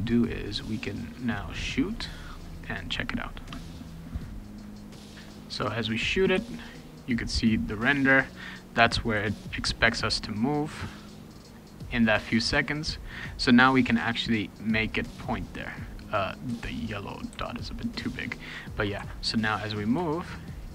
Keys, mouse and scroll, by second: 1.4 click, 4.9 w, 5.1 right click, 5.2 click, 6.3 d, 16.5 s, 17.3 d, 19.0 shift+a.